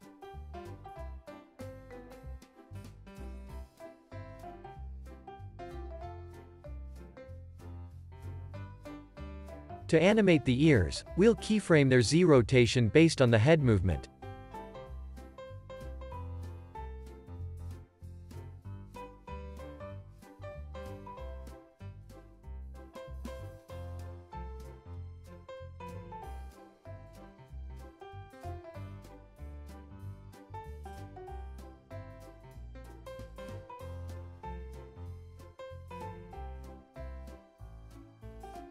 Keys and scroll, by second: 4.2 space, 4.5 super+s, 4.8 q, 16.6 x, 37.0 x, 38.0 z.